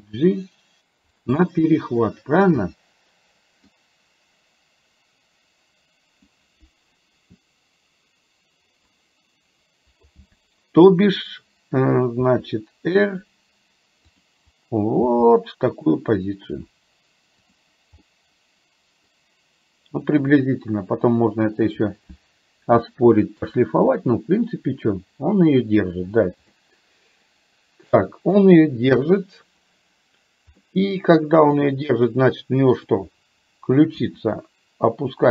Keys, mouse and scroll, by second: 1.4-3.8 middle drag, 12.4 r, 15.0 g, 18.1-21.9 middle drag, 22.9 shift+scroll up 1, 23.1 shift+middle click, 26.6-28.4 middle drag, 29.0 KP_1, 30.6-31.6 middle drag, 32.8 click, 34.0 r.